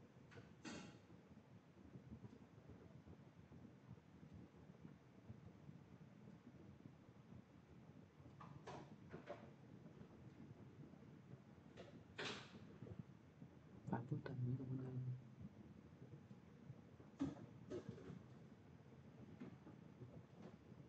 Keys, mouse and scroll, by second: 5.2 click, 5.2 x, 5.6 click, 8.6 click, 9.0 x, 9.4 click, 10.5 click, 14.8 click, 16.8 click, 16.8 x, 17.2 click, 19.7 click, 19.7 x, 20.0 click.